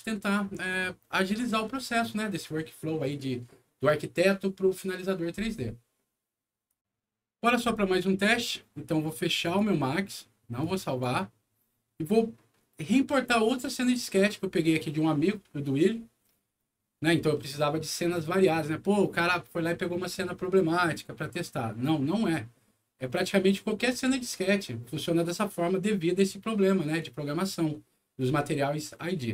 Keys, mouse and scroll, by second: 6.7 click, 9.4 click, 10.6 click.